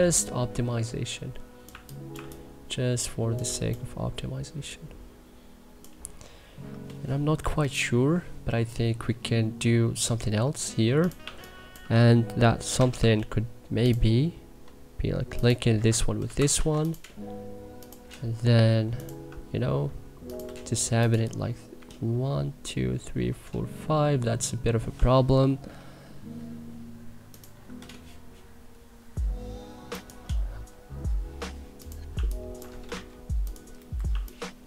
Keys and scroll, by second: 1.5 1, 1.9 2, 11.0 2, 12.5 k, 15.6 Escape, 16.0 c, 16.3 e, 32.7 w, 33.8 Delete, 33.9 2.